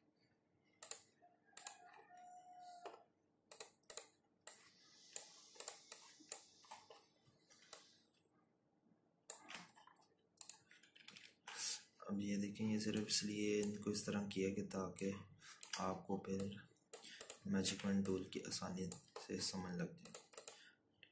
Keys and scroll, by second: 12.1 ctrl+-, 12.2 ctrl+-, 18.7 z.